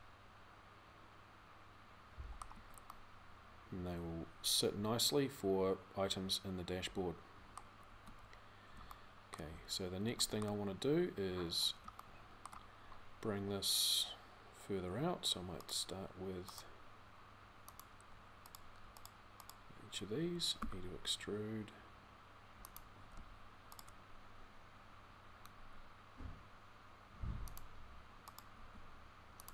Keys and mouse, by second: 2.3 z, 4.3-7.7 middle drag, 7.7 z, 10.6 click, 11.6 click, 20.4 e, 25.3 r, 28.3 g.